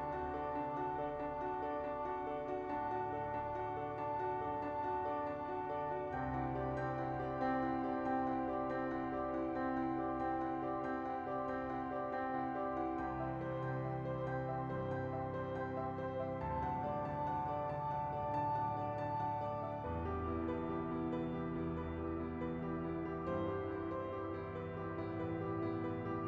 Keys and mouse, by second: 0.0 e, 0.2 z, 1.5 e, 1.7 s, 2.9 right click, 3.1-5.4 typing, 5.9 right click, 6.1 ctrl+z, 6.6 e, 6.9 z, 8.4 e, 8.6 s, 9.8 e, 10.1 z, 10.3 right click, 10.8 shift+middle click, 11.4 ctrl+z, 12.0 e, 12.1 z, 13.0 s, 13.7 ctrl+z, 13.9 ctrl+z, 14.6 e, 14.6 z, 16.3 e, 16.3 z, 17.4 ctrl+z, 17.8 e, 18.3 s, 19.6 middle click, 20.3 KP_7, 21.3 s, 23.6 KP_1, 24.3 shift+middle click, 24.8 e, 24.9 z.